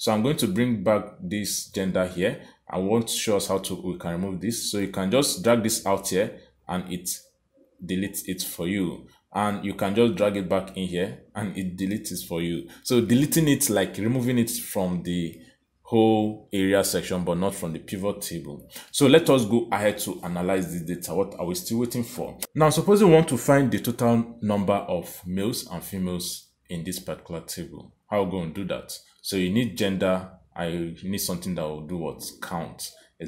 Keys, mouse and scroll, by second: 4.2 click, 7.2 click, 9.3 click, 16.7 click, 21.8 click.